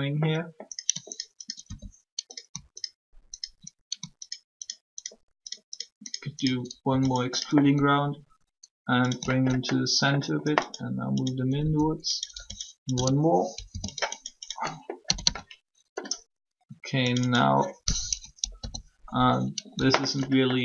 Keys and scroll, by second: 7.6 shift+s, 11.6 s, 12.3 e, 12.9 s, 13.6 0, 15.0 typing, 17.8-18.5 typing.